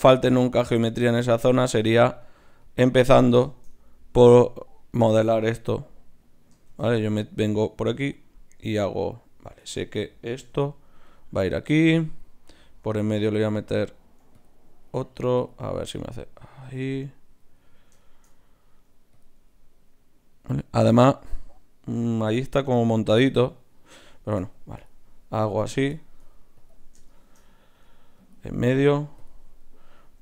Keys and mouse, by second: 0.3 g, 1.3 g, 2.4 g, 3.0 click, 4.9 click, 6.1 right click, 6.7 shift+d, 8.8-10.5 middle drag, 10.5 g, 13.2-17.3 drag, 16.7 g, 19.1-20.2 drag, 24.8-30.2 drag, 27.5 middle click, 27.5 right click.